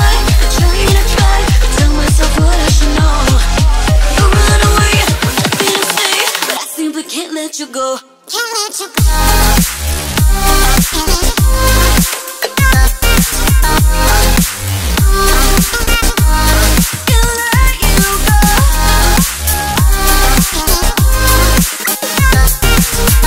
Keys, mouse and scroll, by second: 3.6 Tab, 6.6-9.7 drag, 10.7 Tab, 11.7-13.2 shift+middle drag, 13.2 click, 13.4-16.5 drag, 20.6 ctrl+s, 21.6 shift+d.